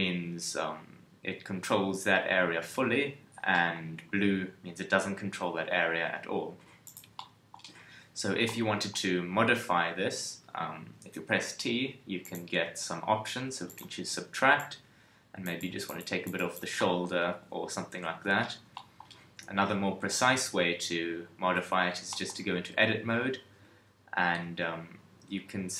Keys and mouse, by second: 5.6 KP_1.